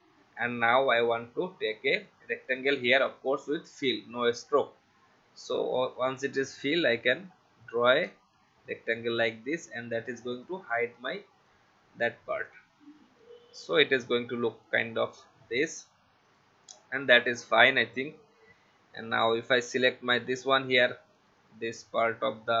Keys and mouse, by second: 1.7 click, 3.1 shift+x, 5.4 click, 8.0 v, 10.4 click, 12.8 v, 13.9 click, 16.3 click, 20.2 click.